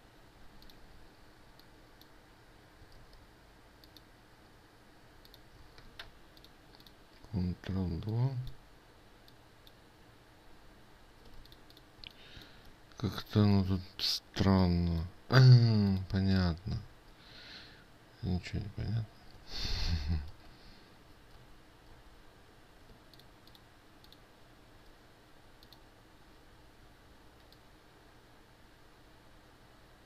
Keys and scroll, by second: 3.6 ctrl+z, 6.4 ctrl+alt+2, 6.4 ctrl+z, 21.0 ctrl+shift+z, 21.9 ctrl+z.